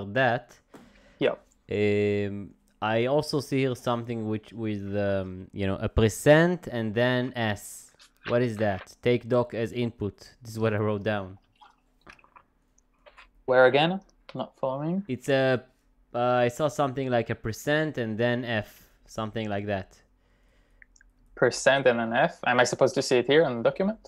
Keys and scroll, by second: 23.7 j.